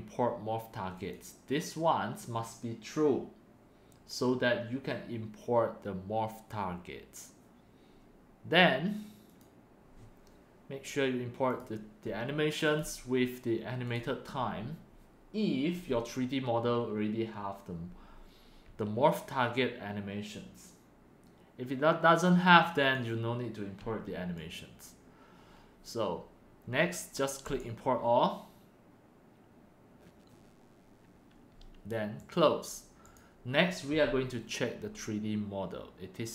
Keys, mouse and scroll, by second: 0.9 click, 6.0 click, 9.2 click, 11.4 click, 13.8 click, 15.5 Num_Lock, 16.7-19.1 drag, 22.7 click, 24.2 click, 25.0-25.6 drag, 25.6 scroll down 1, 27.3 click, 31.6 drag, 32.1 click, 33.0 click.